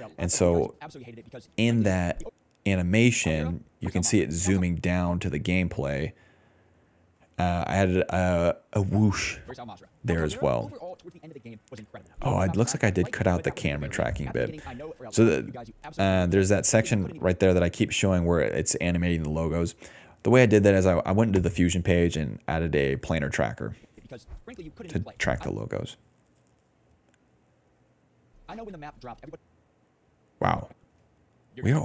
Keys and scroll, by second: 1.2 ctrl+s, 2.2 ctrl+space, 2.6 ctrl+s, 3.1 ctrl+space, 3.3 ctrl+d, 3.6 ctrl+d, 4.5 ctrl+space, 5.6 ctrl+a, 8.9 ctrl+d, 9.3 ctrl+space, 10.0 ctrl+s, 10.9 ctrl+d, 11.8 ctrl+d, 12.3 ctrl+s, 13.5 ctrl+s, 14.5 ctrl+s, 15.7 ctrl+d, 17.2 ctrl+space, 22.6 ctrl+d, 22.7 ctrl+d, 23.4 ctrl+s, 23.8 ctrl+s, 23.9-26.0 typing, 27.4-30.1 typing, 30.8 ctrl+s.